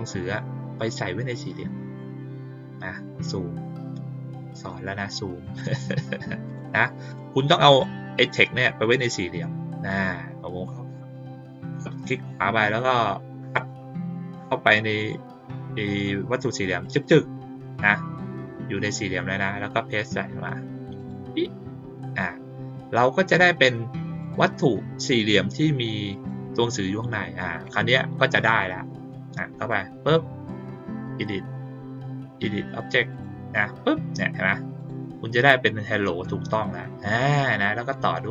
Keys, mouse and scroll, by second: 2.7 click, 5.5 click, 6.4 click, 7.0 click, 7.6 click, 11.6 right click, 13.5 click, 14.9 click, 16.8 click, 17.0 click, 20.9 click, 24.1 click, 26.0 click, 29.0-29.6 drag, 31.0 click, 33.0 click, 34.7 click, 37.8 click.